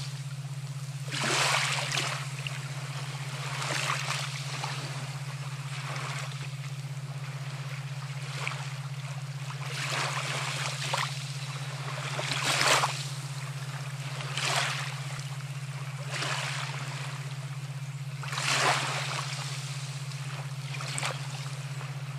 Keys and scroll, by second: 17.0 ctrl+0.